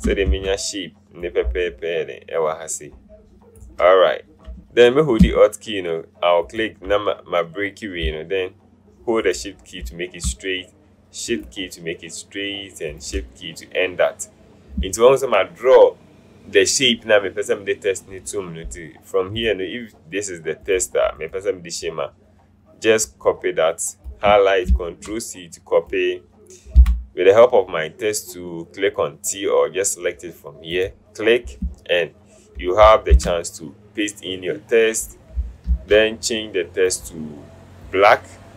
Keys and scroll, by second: 0.4 ctrl+z, 4.6 ctrl+z, 24.8 ctrl+c, 26.9 t, 33.4 ctrl+v, 35.8 ctrl+a.